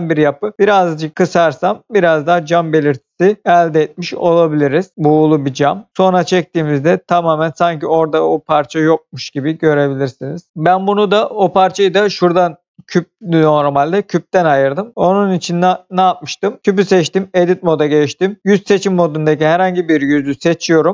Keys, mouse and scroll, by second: 0.4 click, 1.1 click, 1.6 middle click, 3.4 click, 3.5 middle click, 5.6 middle click, 5.9 click, 6.6 middle click, 8.4 middle click, 10.5 click, 15.2 click, 16.8 Tab, 19.2 click, 20.1 middle click.